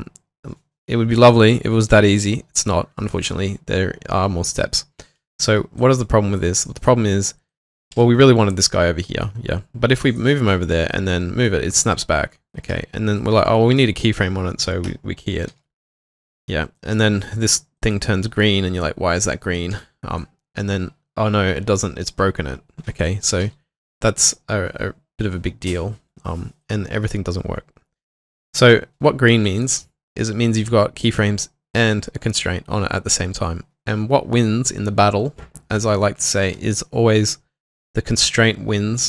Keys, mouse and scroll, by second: 8.0 typing, 14.9-16.3 typing, 19.7 typing, 23.2-23.9 typing.